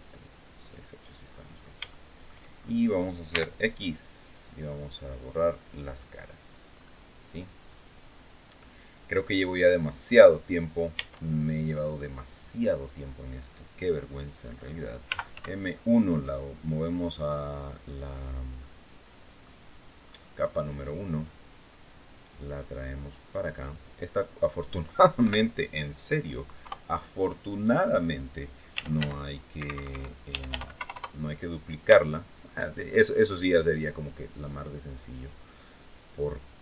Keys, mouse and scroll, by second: 1.0-1.3 scroll down 2, 1.5 shift+scroll down 2, 1.6 shift+middle click, 2.3 shift+scroll up 3, 3.0 x, 4.9 click, 6.0-6.3 scroll down 2, 6.5-7.0 scroll up 2, 7.3 scroll down 1, 8.8 click, 9.8 click, 10.7 Tab, 11.2-11.8 scroll down 1, 14.8 m, 15.0 1, 16.9 click, 17.5-18.2 scroll down 2, 18.3-19.3 middle drag, 19.7-20.2 scroll up 1, 20.3-20.7 scroll down 1, 22.1-23.1 drag, 24.1-24.4 scroll up 1, 24.9 KP_7, 26.3 KP_3, 28.2-30.7 typing, 29.4 Escape, 31.8 shift+click, 32.9-35.1 drag, 35.8-36.6 drag.